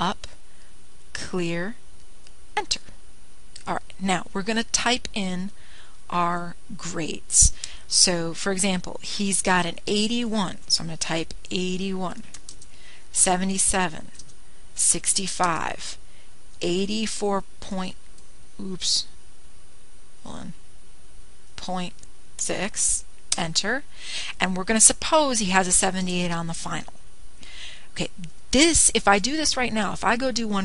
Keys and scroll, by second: 0.4 (, 1.4 Up, 4.1 Return, 13.7 8, 13.9 1, 14.5 Return, 15.0 7, 15.3 7, 15.7 Return, 16.6 6, 16.8 5, 17.1 Return, 18.2 8, 18.6 4, 19.1 Right, 22.2 (, 23.1 ., 24.0 6, 24.7 Return, 26.4 7, 27.0 8, 27.5 Return.